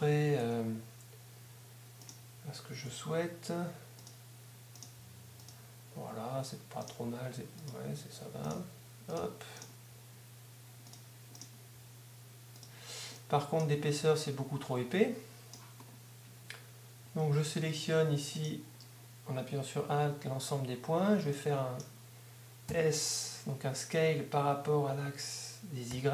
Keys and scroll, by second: 0.0-0.6 typing, 2.9 g, 4.1 g, 5.0 g, 6.1 g, 7.0 g, 8.1 g, 8.6 g, 9.9 g, 10.1 g, 11.8 g, 12.1 g, 25.9 y, 26.0 y.